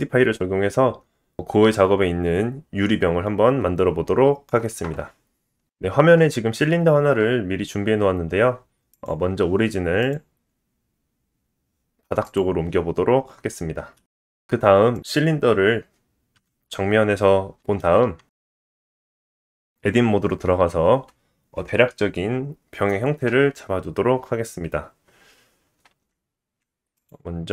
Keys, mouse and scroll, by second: 5.6-8.9 middle drag, 8.2-8.9 scroll up 1, 8.9 click, 9.0 middle click, 10.0-14.0 drag, 14.0-27.5 middle drag, 16.3 KP_1, 18.7 Tab, 25.9 ctrl+r.